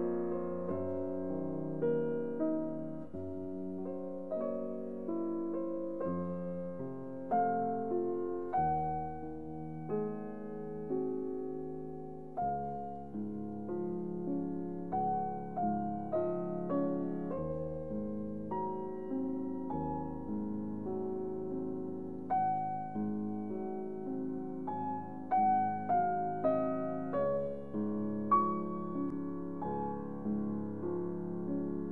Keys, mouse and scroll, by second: 1.8 click, 3.1-11.4 middle drag, 13.3 click, 15.0-18.7 middle drag, 18.7 click, 21.2 shift+Num_Lock, 21.2 click, 21.3 shift+click, 26.1 shift+click.